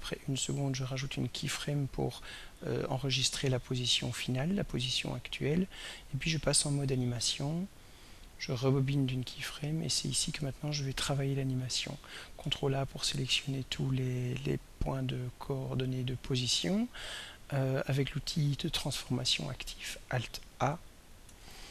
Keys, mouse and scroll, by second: 0.8 click, 2.2 click, 6.5 click, 8.0 click, 9.5 click, 12.1 click, 12.6 ctrl+a, 21.2 alt+a.